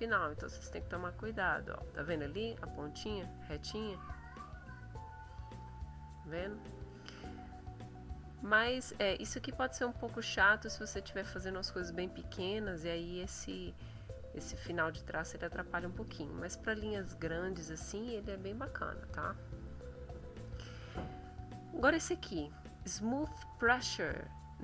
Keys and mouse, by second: 0.0-1.5 drag, 4.3-5.8 drag, 7.2 middle click, 8.6 click, 10.6-11.6 drag, 12.5-15.3 drag, 15.8 click, 18.3 click, 18.8 click, 19.6 click, 20.2 click.